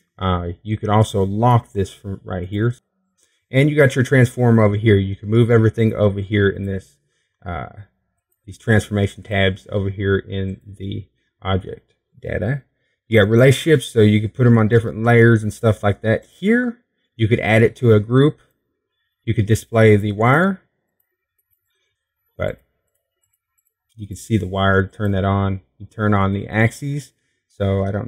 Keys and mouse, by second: 1.4-5.0 drag, 5.0-19.8 middle drag, 21.5 click, 21.9 Tab, 22.5 Tab, 24.1-28.0 drag.